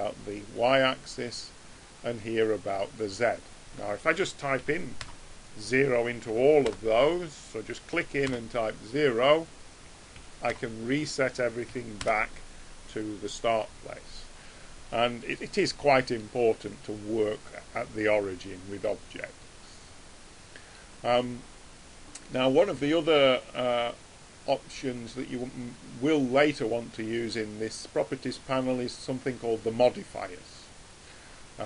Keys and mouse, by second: 1.3 click, 3.5 click, 5.6-9.1 drag, 9.5-12.7 drag, 12.7-25.5 middle drag, 25.5 click.